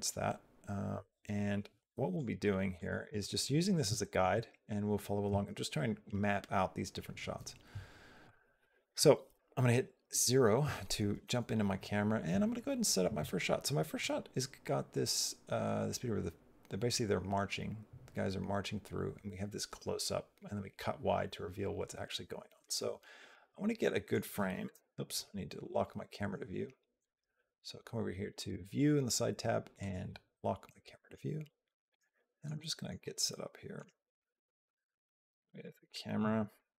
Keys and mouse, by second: 2.7-3.7 drag, 3.8 shift+middle click, 8.0 click, 9.1 KP_0, 13.8-22.5 drag, 23.1 middle click, 23.5 click, 23.8 click, 24.5 KP_0, 29.6 click, 30.5 middle click, 30.5 click, 31.9 shift+middle click, 32.4 middle click, 33.1 shift+middle click, 33.3 shift+click, 34.0 shift+click, 34.5 click, 35.7 shift+click, 36.4 shift+click.